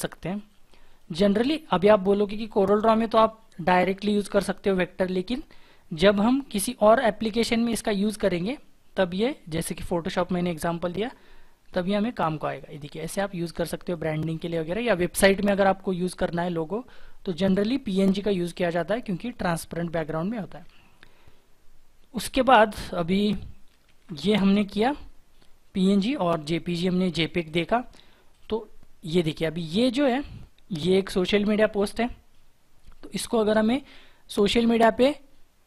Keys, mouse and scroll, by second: 8.2-8.9 scroll down 1, 8.9-10.6 scroll down 1, 10.6-14.3 scroll up 1, 14.3-16.0 scroll down 1, 20.4 Delete, 23.8 shift+F4.